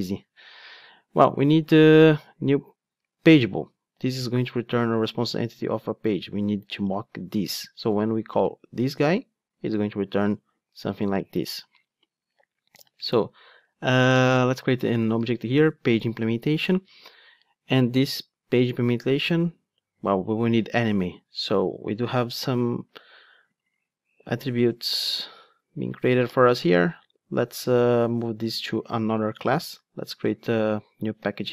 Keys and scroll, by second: 3.1 ctrl+Tab, 11.9 ctrl+Tab, 16.1 Return, 29.6 super+c, 31.2 super+n.